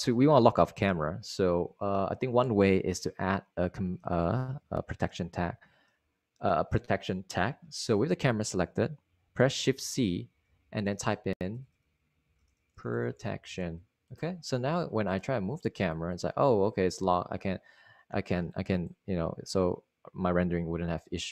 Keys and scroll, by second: 10.1-14.3 typing, 16.1 typing.